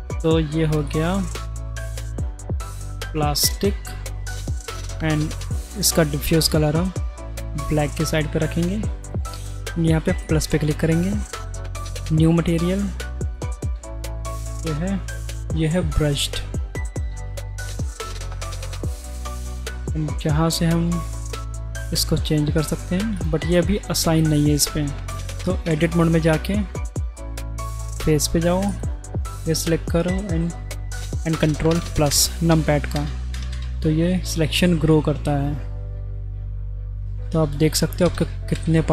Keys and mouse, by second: 0.7 click, 1.0-3.5 drag, 5.8 click, 9.0 click, 10.2 click, 11.6 click, 13.4-17.1 drag, 19.2 click, 21.4 click, 23.2 click, 25.2 click, 25.9 Tab, 26.7 3, 28.7 click, 31.7 ctrl+KP_Add, 32.1 ctrl+KP_Add, 32.5 ctrl+KP_Add, 33.0 ctrl+KP_Add, 33.3 ctrl+KP_Add, 33.5 ctrl+KP_Add, 34.9 click, 38.0 ctrl+KP_Add, 38.5 ctrl+KP_Add.